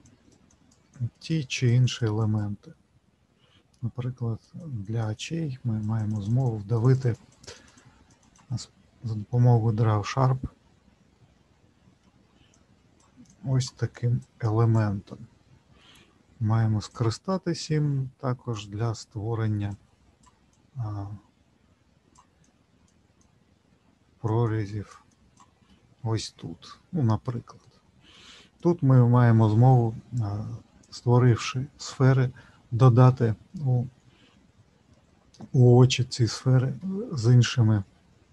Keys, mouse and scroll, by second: 2.7 middle click, 4.4 click, 4.8-11.1 click, 11.1 middle click, 12.5 click, 13.3 click, 15.1 middle click, 16.9 click, 19.7-24.8 click, 25.7 middle click, 33.6 middle click, 36.8 middle click.